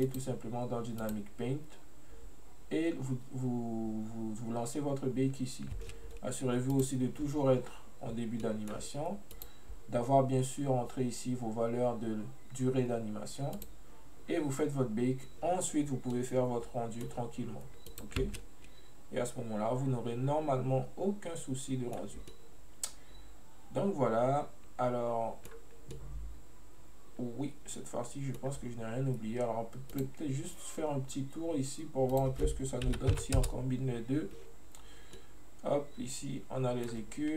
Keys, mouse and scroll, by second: 0.1-4.1 drag, 6.8-8.5 drag, 8.5 middle click, 9.4-12.4 drag, 13.6-16.2 drag, 16.2-17.9 middle drag, 17.9 click, 18.4-21.5 middle drag, 22.4-25.4 middle drag, 26.0-29.1 middle drag, 30.0 click, 32.2-35.2 drag, 35.3-37.3 middle drag.